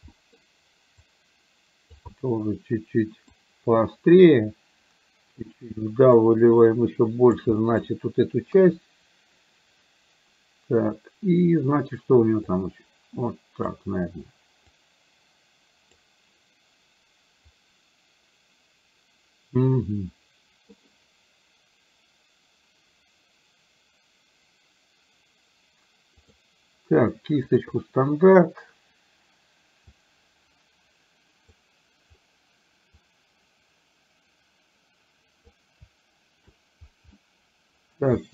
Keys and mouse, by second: 0.1 middle click, 1.1-2.1 drag, 2.3-3.4 middle drag, 4.5 click, 6.3-7.5 drag, 7.6 middle click, 8.5 KP_1, 12.5-13.8 drag, 14.8-16.0 drag, 19.8-20.8 middle drag, 26.3 click, 27.6 click, 29.9-31.6 drag, 33.0-35.5 drag, 37.3 middle click.